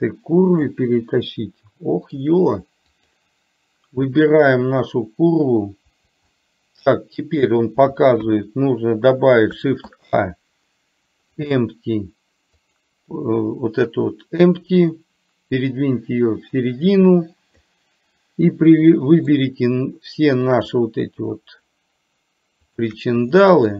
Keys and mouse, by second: 1.5-2.4 middle drag, 3.0 click, 6.4-7.0 middle drag, 9.9 shift+a, 15.1-17.7 drag, 18.7-19.5 middle drag, 20.6 click, 22.9 shift+drag, 23.5 middle drag.